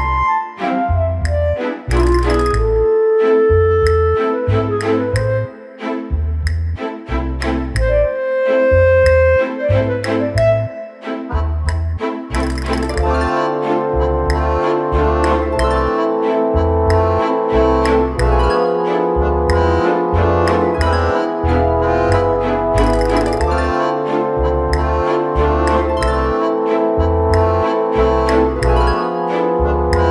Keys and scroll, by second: 29.6 ctrl+Return.